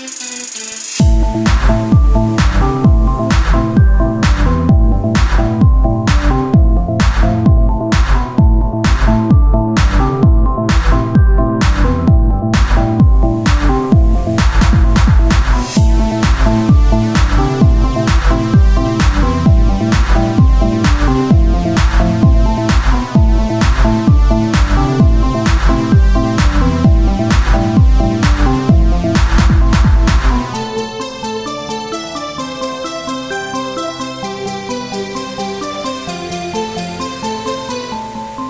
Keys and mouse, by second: 0.7 Tab, 0.9 click, 1.5 Tab, 2.3 ctrl+Tab, 4.8-7.0 drag, 5.1-6.8 right drag, 7.0 middle click, 7.8 Tab, 7.8 click, 15.8 KP_1, 18.0 z, 20.5 z, 20.8-22.2 drag, 23.0 shift+d, 24.4 z, 25.1-26.6 drag, 26.6 z, 26.8 Tab, 27.4 ctrl+Tab, 27.9-28.9 drag, 28.9 z, 29.1 c, 30.3 x, 30.8 Tab, 31.8 Tab, 31.8 click, 32.7 Tab, 33.8 Tab, 33.8 ctrl+r, 35.5 click, 36.2 z, 36.6 Tab, 37.6 Tab, 38.2 ctrl+z.